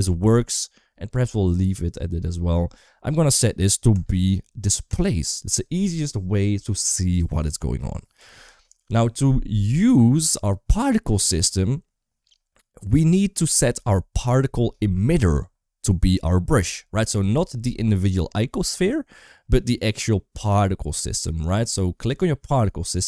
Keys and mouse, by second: 3.7-4.9 drag.